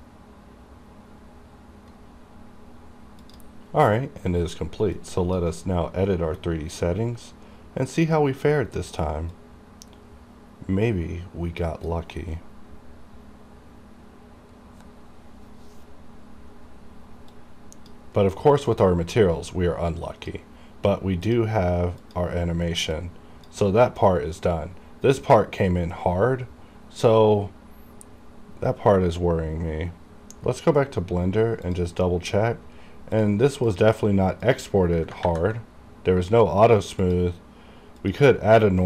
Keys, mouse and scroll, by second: 9.4 click, 9.5-14.4 drag, 17.4 click, 18.3-18.8 scroll up 1, 18.8-23.8 drag, 23.8 scroll down 1, 24.1-27.7 drag, 27.7-28.6 scroll up 1, 30.5 scroll down 1, 31.8 click, 32.4-33.3 scroll up 1, 33.3 click, 37.1 click.